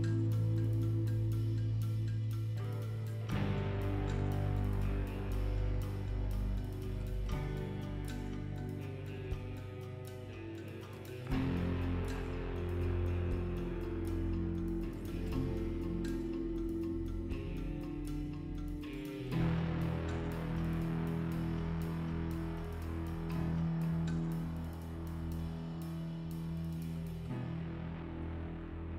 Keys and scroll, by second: 4.0 s, 22.6 f, 24.6 l.